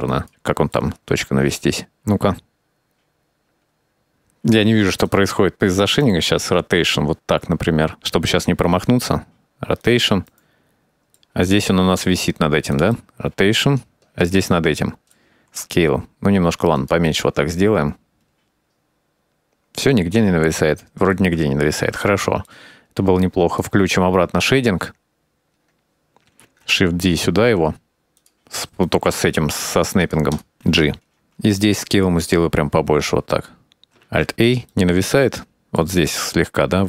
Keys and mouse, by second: 0.1 KP_Decimal, 0.2 middle click, 1.2 middle click, 1.8 click, 2.1-4.2 typing, 3.3 middle click, 3.6 middle click, 4.9 click, 6.1 r, 8.0-8.7 middle drag, 8.9 r, 10.0-11.2 middle drag, 11.5 r, 13.0-14.9 middle drag, 15.9 s, 17.1-21.2 middle drag, 22.1-22.5 middle drag, 23.9-24.6 drag, 27.0 shift+d, 29.4 click, 30.7 g, 32.2 s, 34.5 alt+a, 35.0-36.6 middle drag.